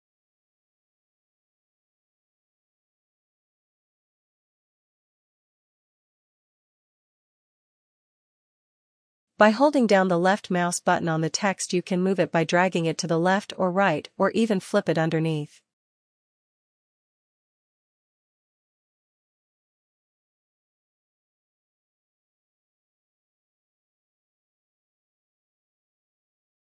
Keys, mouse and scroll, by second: 0.3 ctrl+*, 8.8 click, 9.6 click, 14.5-19.5 ctrl+click, 15.4 ctrl+z, 16.9 click, 17.6 click, 17.8 click, 18.0 click, 18.6 click, 18.8 click, 18.9 click, 22.3 ctrl+z.